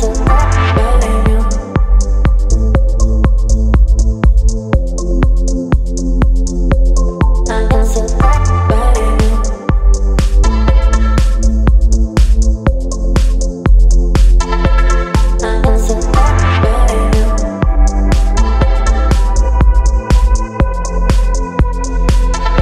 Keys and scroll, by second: 11.6 ctrl+t, 14.5 Return.